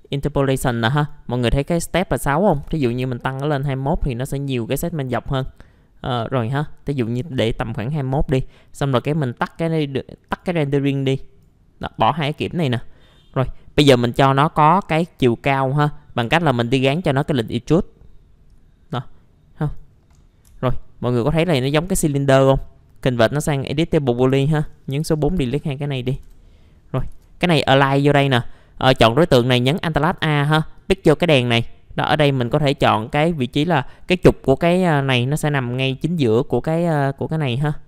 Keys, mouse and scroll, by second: 2.5 KP_2, 2.6 KP_1, 7.3 middle click, 7.4-8.0 scroll down 1, 8.0 middle click, 9.5 click, 12.9 middle click, 13.2-13.7 scroll up 1, 17.1-20.2 drag, 20.2 middle click, 22.3 right click, 23.7 click, 24.3 4, 24.5 click, 25.0 Delete, 25.4 Delete, 25.6-26.1 scroll down 1, 26.1 1, 26.2 1, 27.1 alt+a, 27.8 middle click, 30.7 click.